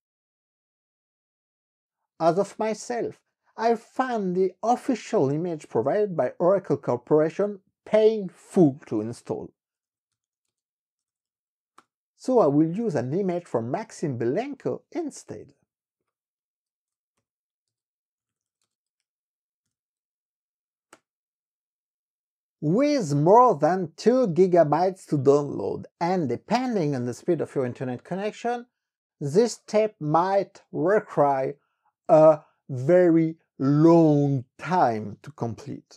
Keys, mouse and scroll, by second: 5.0 click, 8.9 click, 9.4-11.2 typing, 11.7 KP_Enter, 13.2 click, 16.0 click, 17.1 ctrl+c, 17.6 alt+Tab, 18.0-19.0 typing, 19.7 ctrl+shift+v, 20.9 Return.